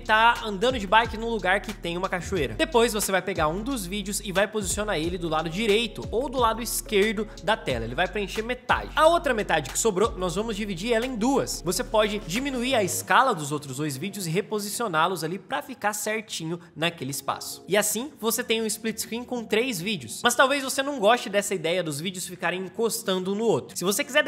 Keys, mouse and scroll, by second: 11.7 Right, 11.8 Up, 11.9 Left, 12.3 Up, 12.7-13.7 drag, 14.6-15.6 drag, 17.6 space.